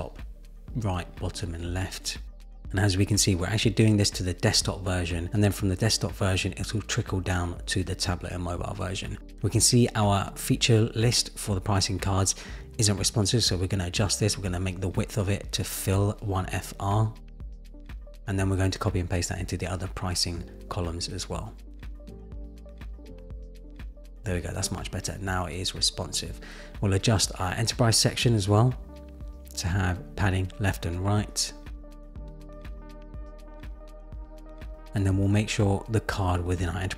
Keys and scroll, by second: 1.6 Return, 4.2 Return, 6.2 Return, 17.0 Return, 17.7 super+z, 18.7 super+v, 23.3 super+v, 30.4 Return, 32.5 Return, 34.0 super+z.